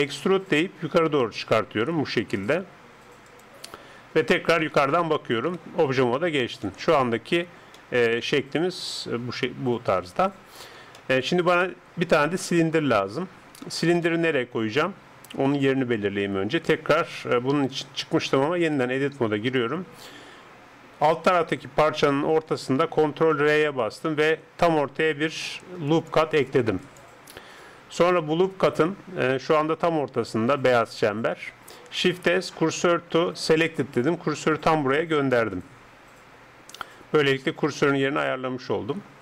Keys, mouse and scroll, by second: 0.2 e, 4.7 KP_7, 5.5 Tab, 6.6-10.0 middle drag, 10.0 KP_7, 11.0-13.2 middle drag, 14.2-18.7 middle drag, 21.9 Tab, 23.1 ctrl+r, 28.8-32.1 middle drag, 32.1 shift+s, 35.3-39.2 middle drag.